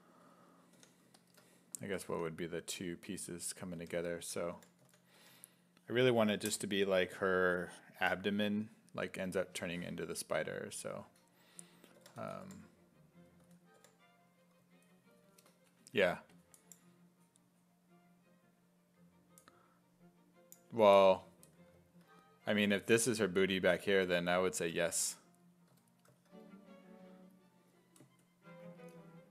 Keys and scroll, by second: 0.2 s, 0.8 w, 2.1 w, 3.6-5.7 typing, 11.8-13.8 typing, 25.8 s, 29.2-29.3 typing.